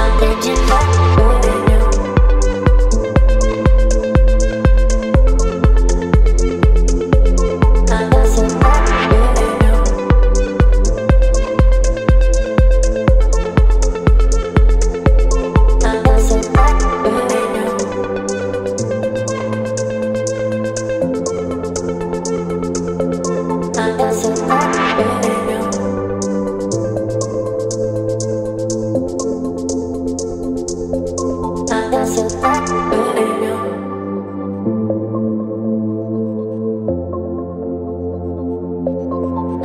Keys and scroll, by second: 6.0 ctrl+d, 13.5 space, 18.8 ctrl+BackSpace, 32.3 KP_6, 32.4 KP_5, 38.7 z.